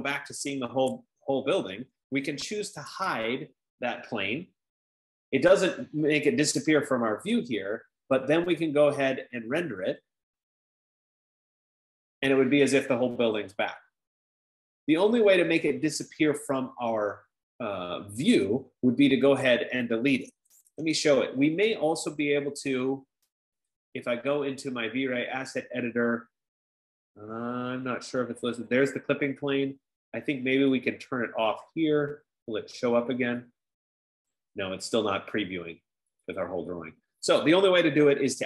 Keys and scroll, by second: 2.9-4.2 typing, 8.5-9.3 typing, 20.7-22.0 typing, 24.2-24.9 typing.